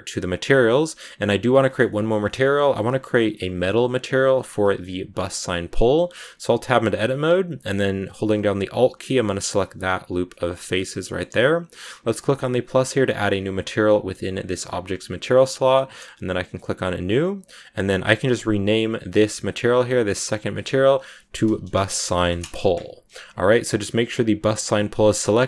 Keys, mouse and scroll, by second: 1.1 click, 1.5-5.8 shift+middle drag, 5.8 Tab, 7.1-7.6 scroll down 1, 7.6-9.2 scroll up 1, 9.2 alt+right click, 9.9 scroll down 1, 10.2-13.0 middle drag, 13.0-17.6 drag, 18.5 click, 19.2 click, 20.6-25.4 drag.